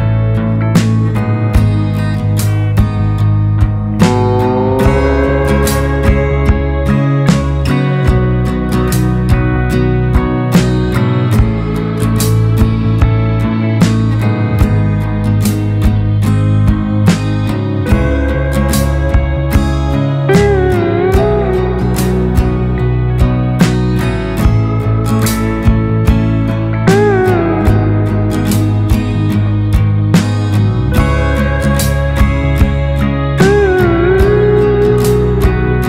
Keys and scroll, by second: 1.8 ctrl+space, 7.9 ctrl+space, 12.8 space, 22.2 ctrl+x, 22.8 ctrl+f, 23.6 ctrl+shift+], 24.4 ctrl+space.